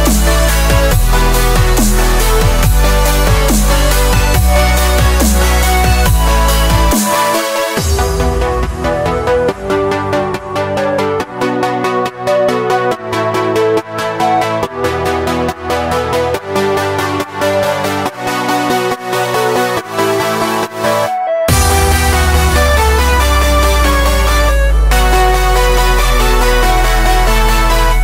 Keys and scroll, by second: 5.9 alt+shift+super+d, 9.3-11.5 typing, 16.5 alt+shift+super+d, 19.4-21.4 typing.